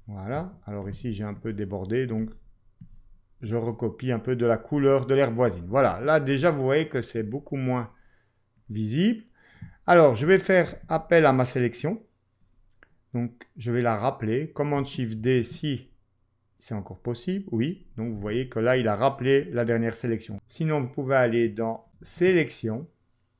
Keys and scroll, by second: 15.2 shift+super+d, 22.0 ctrl+q.